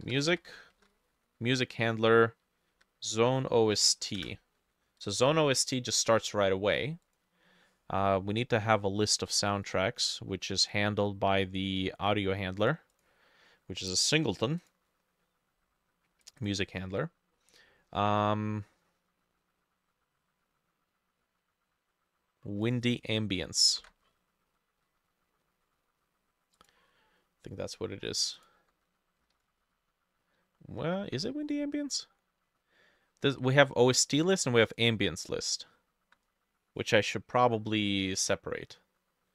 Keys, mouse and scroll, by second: 0.0-0.8 typing, 0.7 ctrl+middle click, 2.7 Down, 4.2 Return, 9.9-15.0 drag, 9.9-10.3 scroll up 1, 10.3-11.3 scroll down 5, 11.3-12.6 scroll up 6, 16.4-19.4 drag, 17.4-18.1 scroll up 1, 22.9-27.9 drag, 23.7 ctrl+middle click, 23.8 ctrl+c, 29.3 ctrl+middle click, 29.4 ctrl+v, 31.1 ctrl+z, 37.7-39.3 scroll up 3.